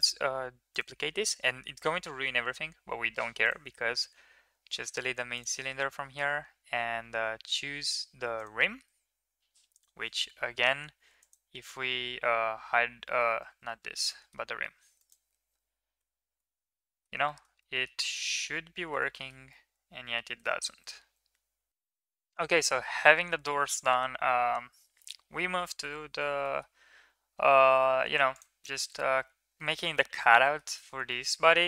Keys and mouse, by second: 3.2 click, 5.1 click, 9.5 click, 9.5 right click, 11.0 click, 11.0 right click, 12.4 h, 13.3 ctrl+z, 13.9 middle drag, 15.8 h, 16.2-16.9 middle drag, 17.1 middle click, 17.4 middle drag, 17.9 middle drag, 18.2-18.7 middle drag, 18.9 shift+middle click, 19.4-20.0 middle drag, 20.3 shift+middle drag, 21.7 ctrl+s, 26.4 shift+middle click, 28.6 middle drag, 30.1 shift+middle drag, 30.4 middle click, 31.1 shift+middle click.